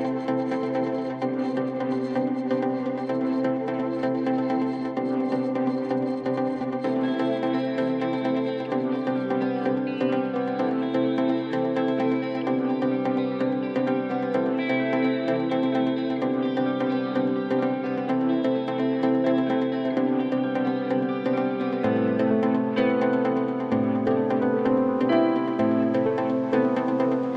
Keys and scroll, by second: 0.4 F4, 2.0 alt+x, 4.3 F4, 10.8 ctrl+t, 11.5 F4, 15.3 F4, 18.7 ctrl+t, 19.4 t, 21.7 Delete, 22.1 F3, 23.0 alt+q, 23.5 4, 24.0 F4, 24.4 3, 26.3 F4, 27.0 1.